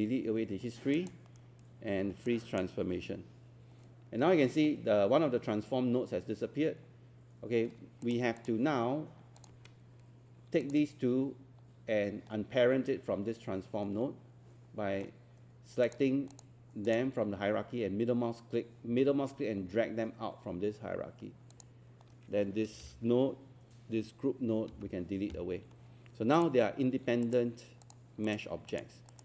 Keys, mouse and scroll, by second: 10.6 shift+click, 13.9-15.2 middle drag, 15.9 click, 16.9 shift+click, 24.7 Delete, 26.4 click.